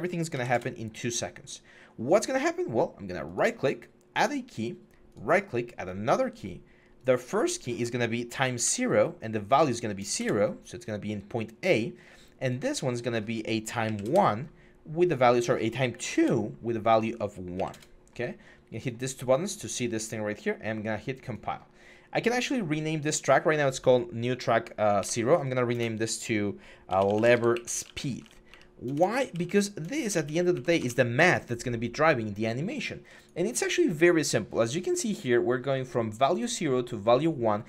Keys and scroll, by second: 0.1 2, 0.3 Return, 8.1 0, 8.4 Return, 9.8 0, 10.0 Return, 13.6 1, 13.8 Return, 15.8 2, 16.0 Return, 17.3 1, 17.5 Return, 24.8 F2, 25.5 BackSpace, 26.7-30.5 typing, 30.6 Return.